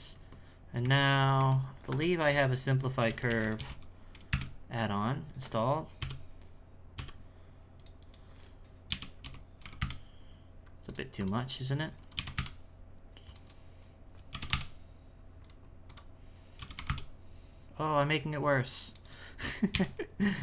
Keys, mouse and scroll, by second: 0.6-1.4 scroll down 6, 0.8 a, 1.4 Tab, 2.2 F3, 6.0 F9, 6.9 F9, 8.0-11.1 drag, 13.4-16.5 drag, 19.0-20.4 drag.